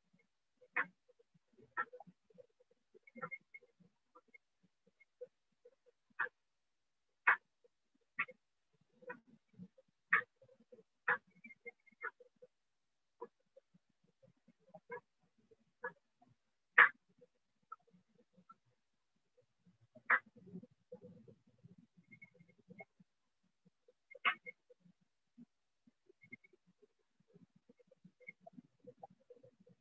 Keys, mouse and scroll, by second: 1.0 alt+click, 1.4 alt+click, 2.6 click, 3.0 click, 4.2 click, 4.5 click, 5.4 click, 5.5 click, 5.9 click, 7.6 click, 8.1 click, 9.6 click, 10.2 click, 10.6 click, 11.2 alt+click, 13.6 click, 13.8 alt+click, 14.1 alt+click, 14.6 click, 15.5 alt+click, 16.0 click, 17.1 alt+click, 17.5 click, 18.2 click, 19.9 alt+click, 21.5 click, 22.1 alt+click, 22.7 shift+click, 27.7 alt+click, 29.1 click, 29.6 alt+click.